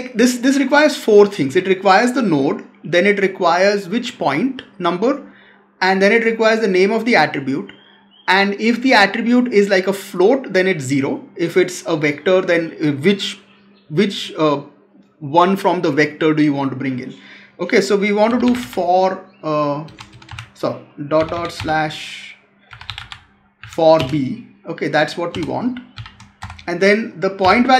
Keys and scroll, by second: 23.5 Down.